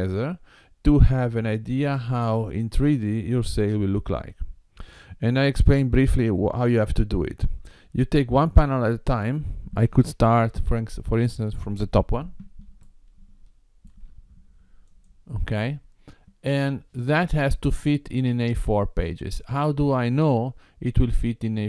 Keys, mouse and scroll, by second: 12.9 shift+middle click, 15.0 click.